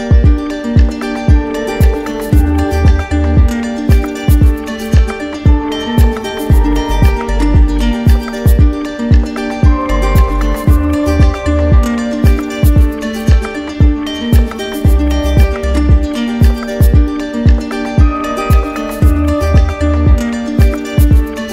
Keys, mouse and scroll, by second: 0.3 right click, 1.5 right click, 2.8 shift+right click, 3.3 shift+right click, 3.5 right click, 4.1 click, 4.3 right click, 5.3 shift+right click, 5.9 shift+right click, 6.6 w, 8.8 click, 9.2 r, 12.4 click, 14.3 click, 14.9 alt+click, 15.8 click, 16.4 click, 16.9 shift+click, 17.6 shift+click, 17.7 click, 18.1 alt+click.